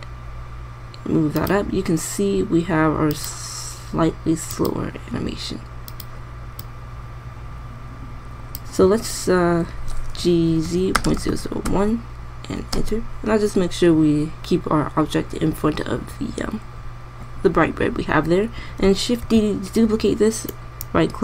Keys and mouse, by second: 10.9 g, 20.0 shift+d.